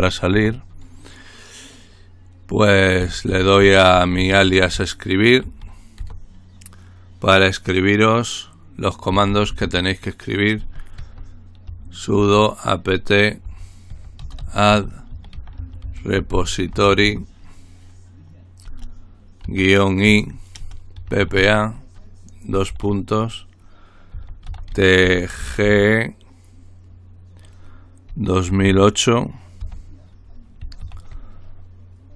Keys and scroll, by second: 0.0-0.3 typing, 2.9-6.0 typing, 8.9-12.2 typing, 13.2-17.5 typing, 19.4-22.7 typing, 23.9-26.1 typing, 28.1-29.6 typing, 30.8 typing.